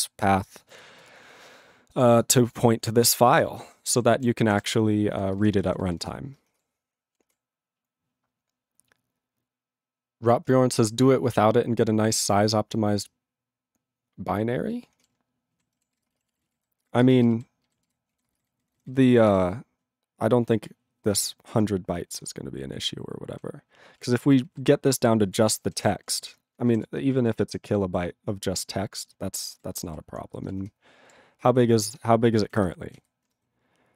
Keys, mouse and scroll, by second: 2.5 click, 3.4 alt+<, 4.0 ctrl+n, 4.1 ctrl+v, 4.2 ctrl+n, 4.5 ctrl+v, 4.6 ctrl+n, 5.1 ctrl+n, 5.3 ctrl+space, 5.4 ctrl+n, 6.0 ctrl+g, 7.5 ctrl+g, 15.1 ctrl+g, 15.5 ctrl+a, 15.9 ctrl+s, 16.0 ctrl+space, 16.1 ctrl+e, 16.1 ctrl+n, 16.3 ctrl+e, 16.5 ctrl+n, 16.6 ctrl+e, 16.7 ctrl+g, 17.0 ctrl+space, 17.4 ctrl+alt+b, 17.8 ctrl+g, 18.1 ctrl+p, 18.3 ctrl+space, 18.5 ctrl+n, 18.9 ctrl+g, 19.3 ctrl+s, 19.3 ctrl+n, 19.9 ctrl+n, 21.4 alt+>, 22.4 ctrl+p, 24.0 ctrl+e, 24.1 ctrl+space, 24.6 ctrl+alt+b, 25.4 ctrl+g, 25.8 ctrl+s, 26.1 ctrl+p, 26.7 alt+<, 27.2 ctrl+v, 27.3 ctrl+n, 29.9 ctrl+s, 30.0 ctrl+p.